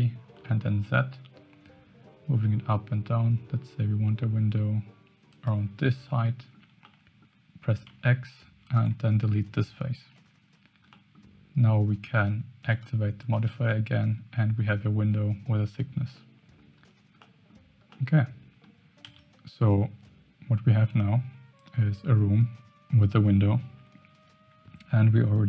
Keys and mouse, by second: 6.0 middle click, 6.8 middle click, 7.8 x, 10.0 Tab, 10.9 middle drag, 12.7 click, 13.3 middle drag, 14.6 middle click, 16.1-16.5 middle drag, 17.2-17.5 middle drag, 17.9-18.6 middle drag, 19.0 KP_0.